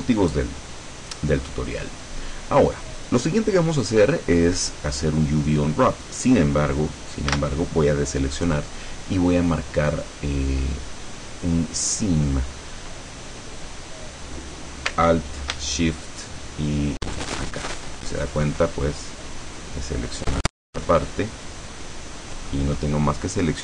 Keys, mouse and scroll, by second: 0.3-0.6 scroll up 2, 1.3-1.6 scroll down 2, 1.6-3.8 middle drag, 7.4 a, 8.8-10.8 middle drag, 11.0-11.5 scroll up 2, 11.5 scroll down 2, 17.2 alt+shift+right click, 18.4-20.8 middle drag, 22.4-22.8 scroll up 2.